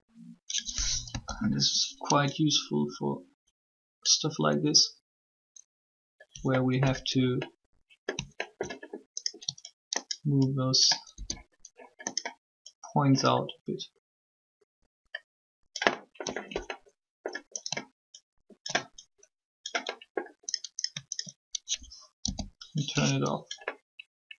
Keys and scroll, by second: 0.8 1, 11.0 ctrl+s, 22.0 shift+o.